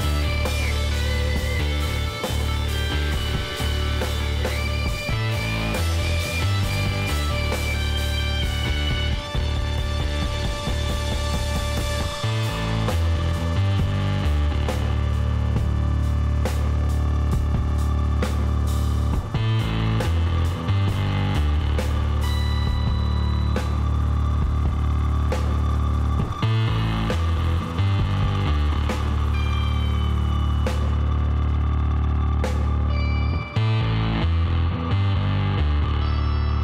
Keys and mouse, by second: 0.1 click, 2.6-3.7 drag, 3.7-6.4 middle drag, 9.7 middle click, 12.3-15.9 drag, 15.3 x, 17.1-18.5 middle drag, 18.5-23.5 drag, 22.5 x, 23.9 middle click, 27.7-29.7 drag, 29.0 l, 29.9 s, 33.1-34.5 middle drag, 34.5-36.6 drag.